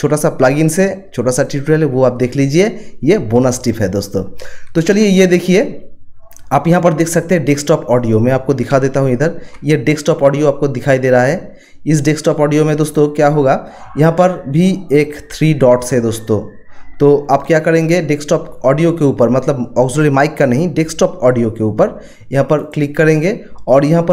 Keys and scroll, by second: 8.7 ctrl+1, 17.3 ctrl+1.